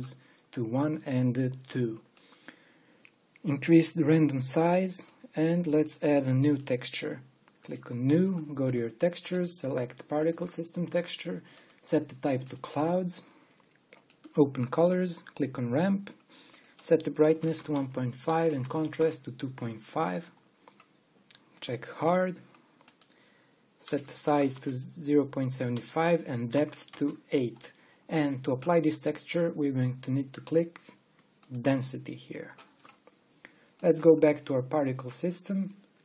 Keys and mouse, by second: 3.8 middle click, 19.7-24.7 middle drag.